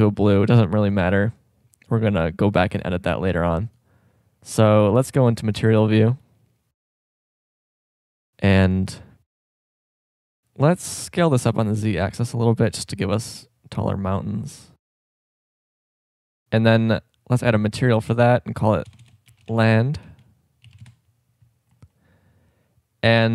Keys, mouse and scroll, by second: 3.1-4.6 drag, 4.8 click, 7.5 KP_0, 10.9 s, 17.4-20.2 drag, 19.0 BackSpace, 21.7-23.3 drag.